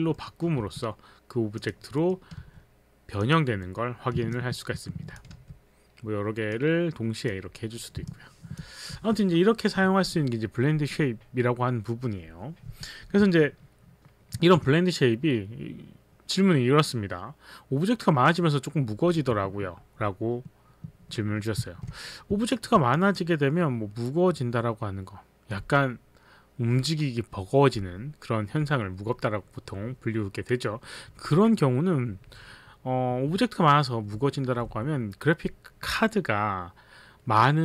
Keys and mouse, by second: 0.1 middle click, 0.1 click, 0.5 z, 1.6 click, 2.0 middle click, 2.4 z, 3.2 click, 3.2 z, 4.0 middle click, 4.5 alt+click, 6.6 click, 8.0 middle click, 8.2 alt+click, 8.2 middle click, 8.6 alt+click, 9.0 z, 14.3 alt+Tab, 21.6 alt+Tab, 22.5 alt+click, 23.0 click.